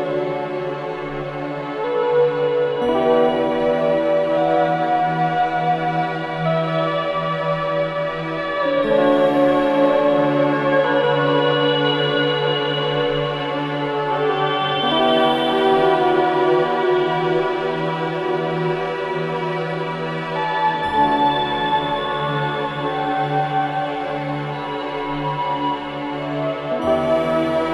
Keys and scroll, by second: 1.3 ], 3.6 ], 10.6 4, 19.2 3, 19.5 ].